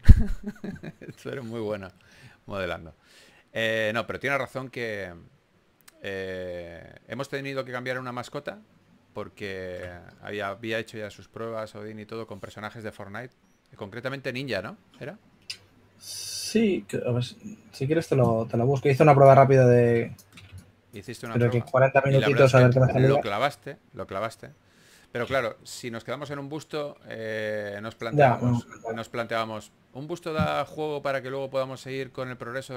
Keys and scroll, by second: 2.3-3.8 typing, 9.9-11.1 typing.